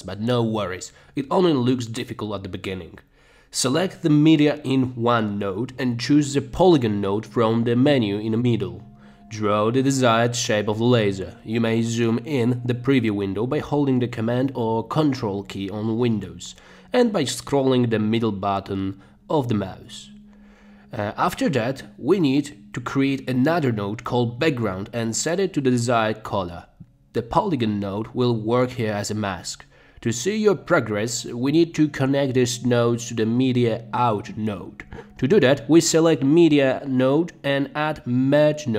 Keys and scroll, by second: 25.7-26.7 typing, 38.6-38.7 typing.